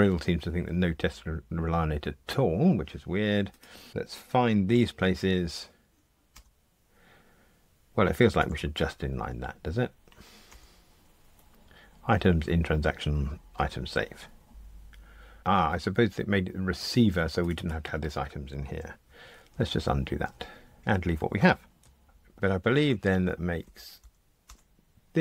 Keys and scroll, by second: 4.7 super+b, 10.8 alt+super+n, 19.0 super+z, 22.7 super+e.